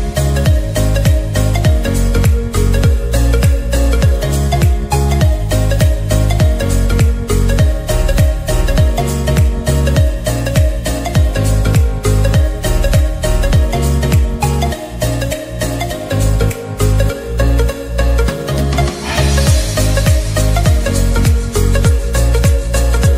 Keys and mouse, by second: 3.2 ctrl+t, 4.8 ctrl+-, 7.6-9.7 alt+drag, 11.0 Up, 13.9 ctrl+=, 16.2-17.9 drag, 17.9 ctrl+z, 19.1 click, 19.9 ctrl+z, 21.6 click, 22.1 Down.